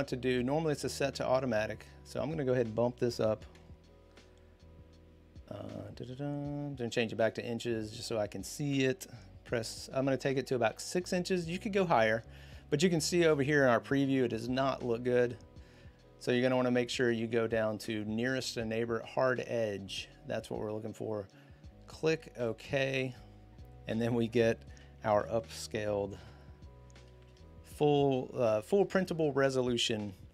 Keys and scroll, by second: 2.8-3.8 typing, 10.5 6, 25.9 ctrl+0.